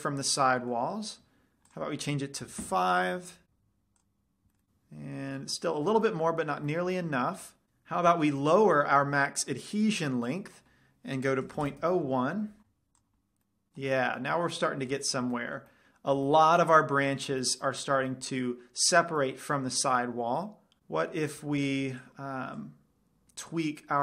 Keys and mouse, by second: 0.2-3.6 middle drag, 2.1-3.6 drag, 4.3 click, 4.3 middle click, 5.8-7.6 middle drag, 10.5-12.4 drag, 13.3 click, 13.6 middle drag, 14.9 middle drag, 15.1-15.5 middle drag, 22.3-24.0 drag.